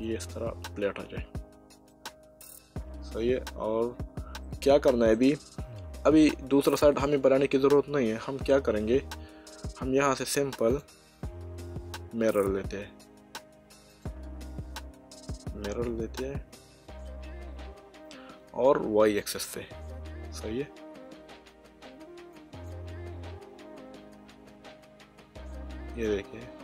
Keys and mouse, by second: 1.9 shift+middle click, 4.4 middle click, 6.2 middle click, 8.5 Tab, 10.7 click, 13.9 click, 19.2 click, 22.3 click.